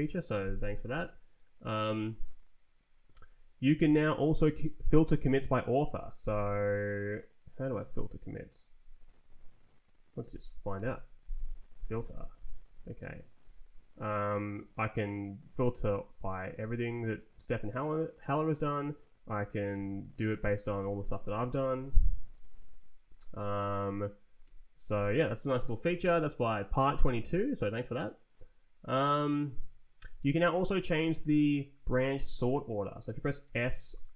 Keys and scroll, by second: 3.9 Left, 4.1 Right, 10.1-12.4 typing, 12.4 Return, 15.7 Return, 16.6 Down, 17.4 Up, 18.5 Escape, 19.6 shift+\, 20.0 Down, 20.5 Return, 21.0-22.1 typing, 22.2 Return, 24.3 Escape, 30.1 ctrl+t, 30.5 Left, 33.3 s.